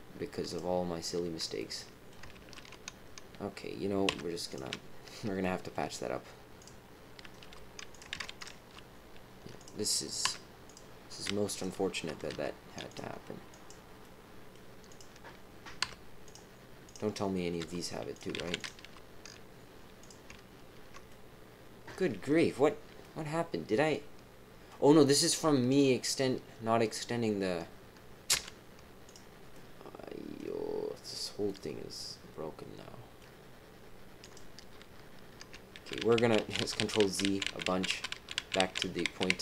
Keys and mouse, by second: 1.5 click, 2.3 ctrl+z, 4.0 x, 5.4 shift+middle click, 6.5 click, 7.4 g, 8.1 ctrl+z, 8.3 click, 8.5 g, 10.2 x, 11.5 click, 12.3 g, 13.5 click, 14.0 click, 14.9 click, 15.8 x, 17.6 g, 18.3 ctrl+z, 18.5 click, 18.8 g, 21.0 click, 23.0 click, 23.5-24.6 middle drag, 25.7-26.8 middle drag, 28.3 x, 29.5 middle click, 31.4-33.2 middle drag, 34.2 click, 35.7 ctrl+z, 36.0 ctrl+z, 36.2 ctrl+z, 36.4 ctrl+z, 36.6 ctrl+z, 36.8 ctrl+z, 37.0 ctrl+z, 37.2-38.6 ctrl+z, 38.8 ctrl+z, 39.0 ctrl+z, 39.3 ctrl+z.